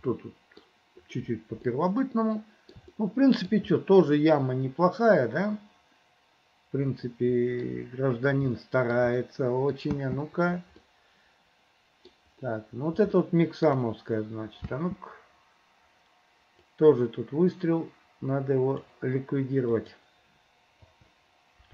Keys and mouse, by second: 0.2 middle click, 1.8 middle click, 3.0 shift+middle click, 3.8 middle click, 5.1-7.7 middle drag, 8.6 shift+middle click, 9.2 middle click, 10.0 space, 10.9-12.3 drag, 13.3 shift+middle click, 14.7 space, 16.7-19.0 drag, 19.7 click, 20.9 Delete.